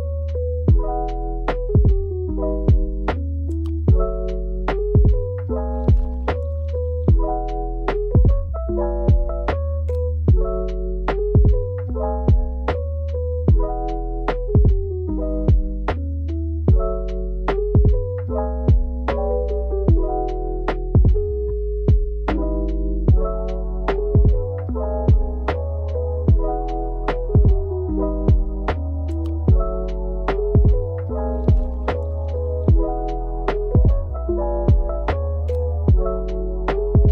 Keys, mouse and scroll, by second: 0.3 drag, 2.3 click, 3.3 shift+click, 3.5 shift+click, 8.8 Tab, 9.7-15.2 middle drag, 12.3 KP_7, 15.9 shift+d, 17.3 x, 20.6 click, 21.6-22.7 shift+middle drag, 23.9 r, 24.8 KP_1, 24.9 KP_5, 25.7 Return, 27.2 g, 27.4 x, 30.7 click.